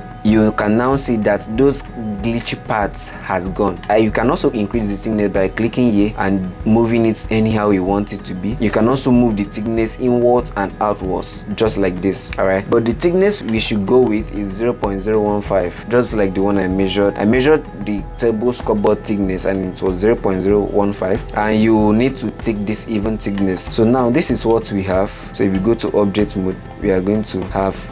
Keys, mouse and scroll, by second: 3.7 middle click, 4.2-6.5 drag, 13.8-15.8 drag, 17.1 click, 23.6-24.2 middle drag, 24.2-25.3 scroll up 13, 24.9-25.3 middle drag, 25.4 Tab, 26.1-27.4 middle drag, 27.4-27.7 scroll up 11, 27.7-27.9 middle drag.